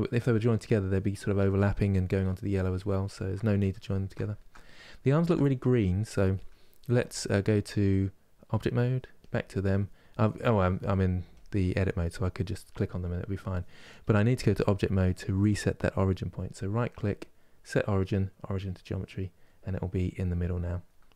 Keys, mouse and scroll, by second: 8.4 click, 14.2 click, 14.7-18.4 middle drag, 18.4 right click, 19.1 middle click, 19.9 click, 20.5-21.1 middle drag.